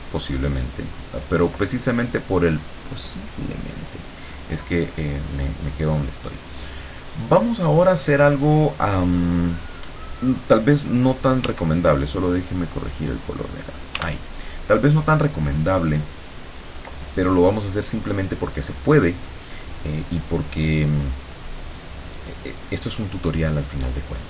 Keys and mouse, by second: 0.3 click, 11.5 w, 12.3-13.7 drag, 14.0 w.